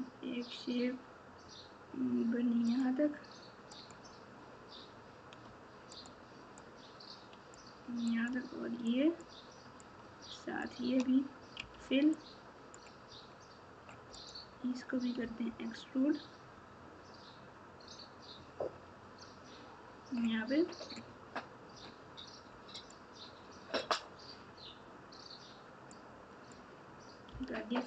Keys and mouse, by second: 3.7 click, 5.9 shift+click, 6.6 shift+click, 7.1 shift+click, 8.2 shift+click, 8.8 shift+click, 10.1 shift+click, 12.1 click, 12.4 click, 14.1 click, 25.9 click, 26.1 click.